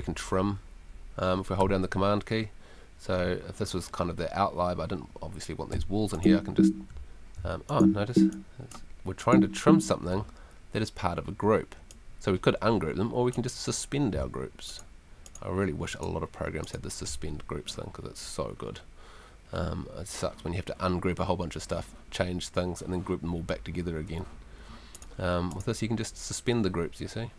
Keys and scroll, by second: 24.3 Escape.